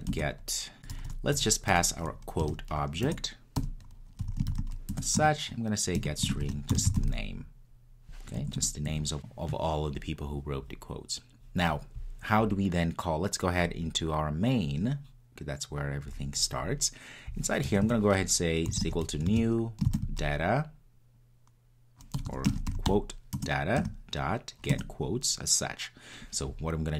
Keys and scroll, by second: 0.2 Return, 3.1 Return, 5.1 Return, 9.2 super+s, 23.4 Return.